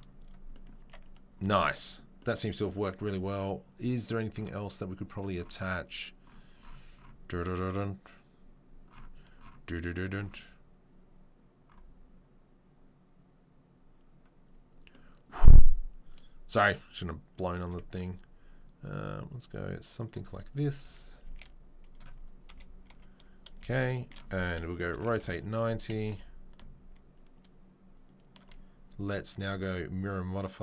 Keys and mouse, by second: 0.2-0.8 drag, 0.8 Tab, 0.8-16.1 middle drag, 16.1-17.6 right drag, 17.6-18.6 middle drag, 17.9 Tab, 18.6-20.1 right drag, 20.1-24.9 middle drag, 20.8 s, 21.2 s, 22.5 KP_3, 22.8 KP_1, 24.9 r, 26.1 g.